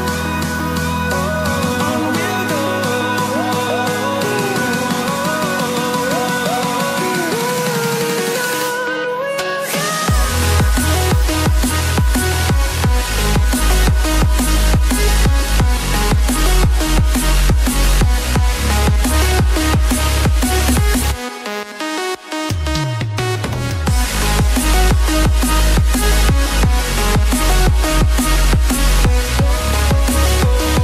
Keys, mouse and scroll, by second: 6.8 click, 10.9 click, 13.7-14.4 scroll down 1, 18.8 scroll up 1, 19.5-20.4 scroll down 1, 21.1-21.4 scroll up 1, 22.0 click, 30.7-30.8 typing.